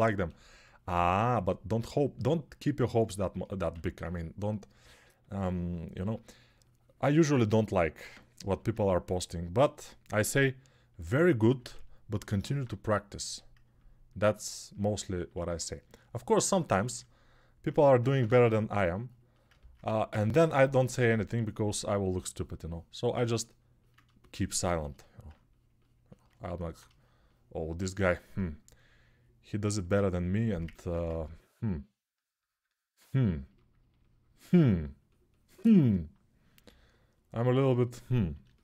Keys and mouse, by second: 0.8 2, 3.5 1, 8.3 g, 17.5 1, 19.6 1, 36.4 g.